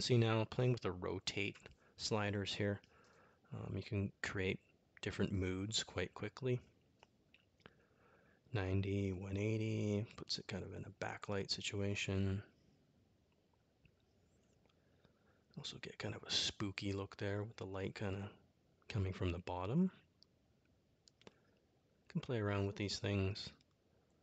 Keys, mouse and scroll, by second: 0.6-3.0 drag, 5.4-7.4 drag, 11.7-14.1 drag, 18.2-20.8 drag, 21.3-23.0 drag, 23.6 click.